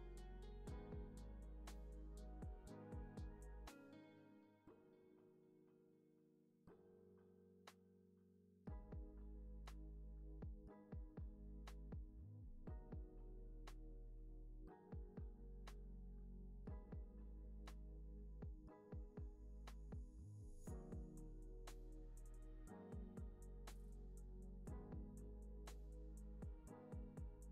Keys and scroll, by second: 4.3 super+c, 4.5 super+v, 5.4 Right, 6.5 Up, 7.7 Down, 8.1 Right, 9.4 alt+x, 11.4 super+c, 11.6 super+v, 13.3 super+c, 13.5 super+v, 15.0 Right, 15.8 Up, 16.3 Down, 16.5 Right, 16.8 Down, 17.4 Left, 19.7 Up, 20.1 Left, 22.0 alt+x, 25.1 super+c, 25.3 super+v, 26.2 super+c, 26.6 super+v, 27.3 alt+w.